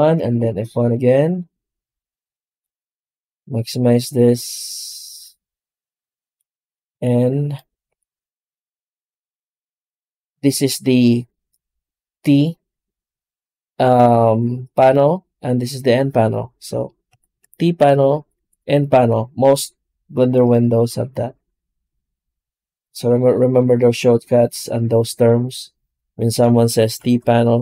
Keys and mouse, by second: 2.6-19.6 drag.